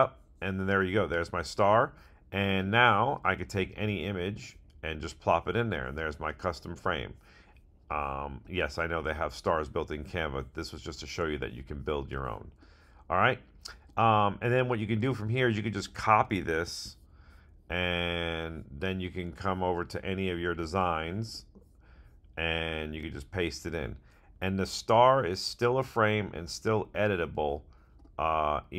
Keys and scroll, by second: 16.6 super+c, 23.0 super+v.